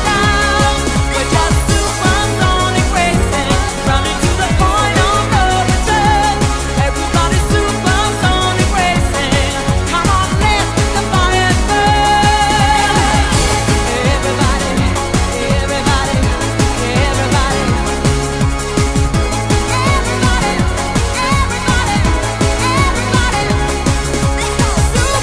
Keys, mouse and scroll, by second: 2.4 click, 5.4 KP_0, 12.7 click.